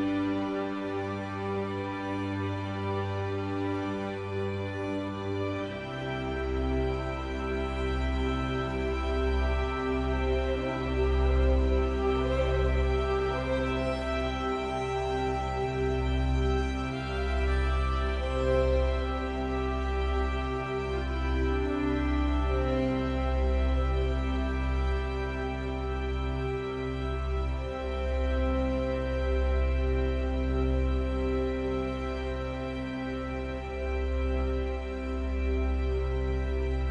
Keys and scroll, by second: 20.5 ctrl+t, 36.4 ctrl+u.